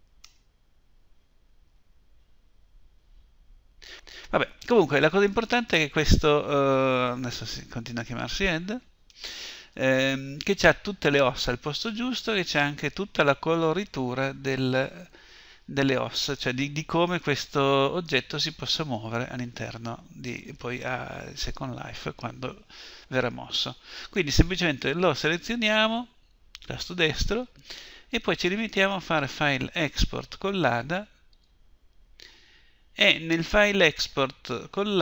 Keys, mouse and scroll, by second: 24.2-25.7 right drag, 25.7-28.1 middle drag, 28.2-29.8 drag.